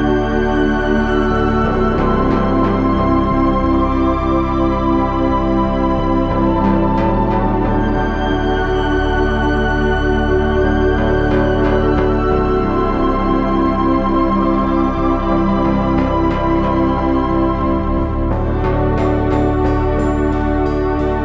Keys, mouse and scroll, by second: 1.3 z, 3.8 click, 4.0 ctrl+z, 8.8 ctrl+Tab, 13.3 KP_3, 14.6 ctrl+Tab, 16.3 g, 18.3 ctrl+Tab.